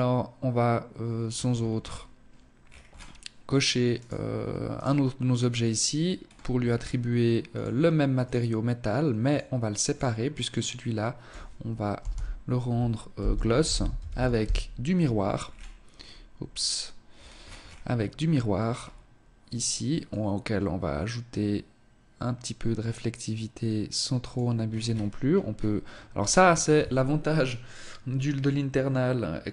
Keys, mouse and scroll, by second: 0.3-1.0 scroll up 9, 1.6-2.2 scroll down 4, 3.0 right click, 3.8 right click, 5.2-6.2 scroll up 7, 6.6 click, 8.3 click, 8.9 click, 14.4 scroll down 5, 15.0-15.6 scroll up 6, 16.2-16.9 scroll down 6, 17.7-18.1 scroll down 3, 18.5 click, 19.1 click, 23.7-26.8 scroll up 13.